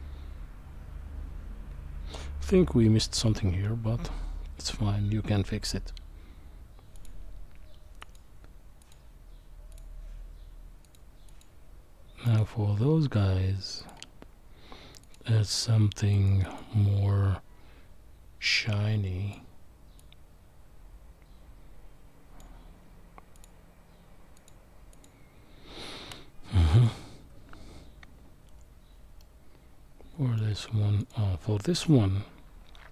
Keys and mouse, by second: 8.0 click, 9.7-11.4 drag, 13.8-16.1 drag, 16.5 click, 18.6 click, 20.0-22.4 drag, 24.4 click, 29.2-30.4 middle drag, 31.0 click.